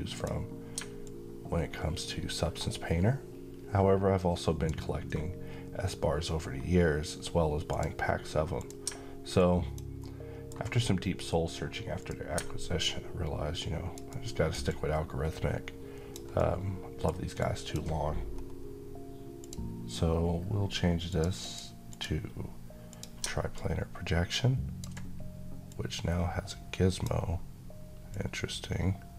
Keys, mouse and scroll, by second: 0.7-4.5 alt+drag, 6.0 scroll up 1, 7.4 click, 9.1-9.6 alt+click, 9.7-10.4 alt+middle drag, 11.7 click, 13.8 alt+right click, 14.4-16.1 alt+drag, 16.1-17.0 alt+middle click, 17.1-17.7 alt+click, 18.0 scroll up 1, 19.1 click, 23.6-24.8 alt+drag, 25.7-26.9 drag, 28.1-29.1 drag.